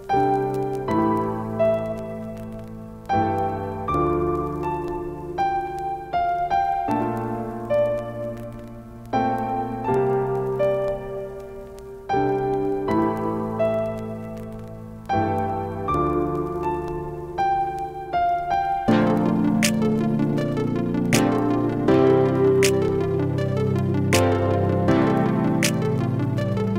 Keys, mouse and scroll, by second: 1.5 ctrl+space, 1.6 ctrl+click, 1.9 ctrl+space, 3.2 click, 4.0 right click, 4.0 typing, 4.9 click, 9.0 click, 9.0 typing, 9.5 right click, 15.0-15.7 typing, 15.5 ctrl+click, 15.8 ctrl+space, 16.5 right click, 18.4-20.9 drag, 20.9 ctrl+z, 21.5 click, 25.3 ctrl+space, 25.5 ctrl+click, 25.7 ctrl+space, 26.0 typing, 26.2 ctrl+click.